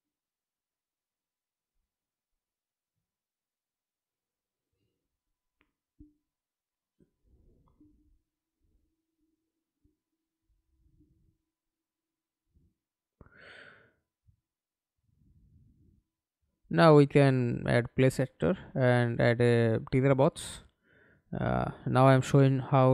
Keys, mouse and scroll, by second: 0.0-0.9 scroll down 3, 1.3 right click, 2.6 scroll down 1, 3.5 right click, 6.6 right click, 7.5-7.8 scroll up 1, 8.1 right click, 10.3 scroll down 1, 10.6-11.0 scroll up 1, 11.0 right click, 13.3 alt+F9, 22.2 f.